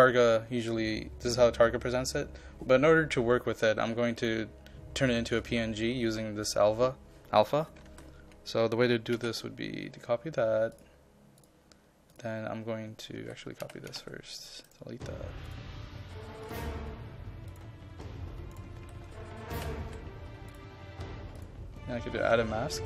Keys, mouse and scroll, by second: 7.9 ctrl+a, 9.2 c, 10.8 click, 13.2 ctrl+a, 13.6 ctrl+c, 13.9 ctrl+v, 14.4 click, 14.7 right click, 15.5-17.5 drag, 18.8 ctrl+a, 19.5 ctrl+c, 20.5 click.